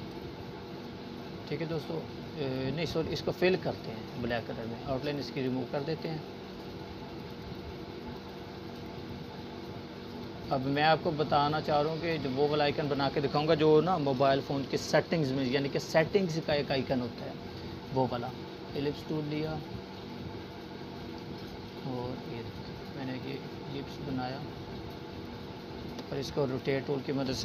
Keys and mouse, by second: 14.6-18.8 drag.